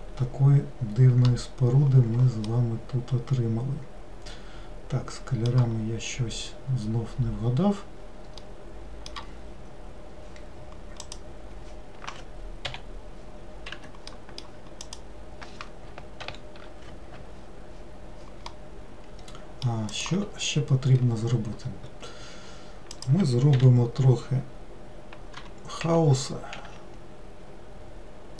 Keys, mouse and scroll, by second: 2.6-5.6 middle drag, 8.5-11.1 middle drag, 11.1 click, 12.7 l, 13.8 Escape, 14.2 middle click, 15.0 click, 16.3 ctrl+l, 18.6-20.0 middle drag, 20.0 click, 23.0 click, 23.6 l, 25.5 g.